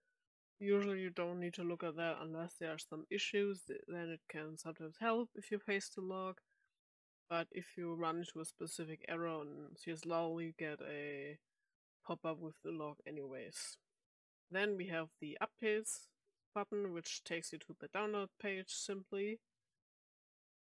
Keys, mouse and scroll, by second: 13.8 click, 15.3 click, 19.9 click.